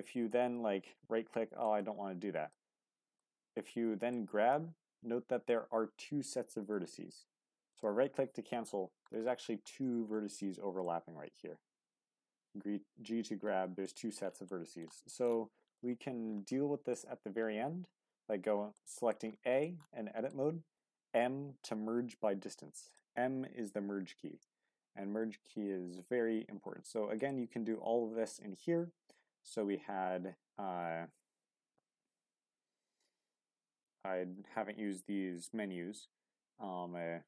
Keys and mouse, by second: 2.5 middle click, 3.7 middle click, 7.7 click, 10.4 shift+click, 11.2 g, 14.5 click, 15.2 click, 16.5 click, 17.8 a, 18.8 click, 18.8 right click, 19.6 click, 19.6 right click, 20.7 m, 27.2-37.2 drag.